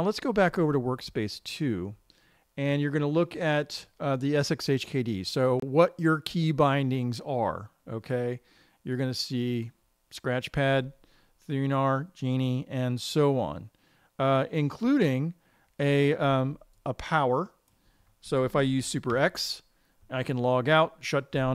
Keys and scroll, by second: 19.5 super+x.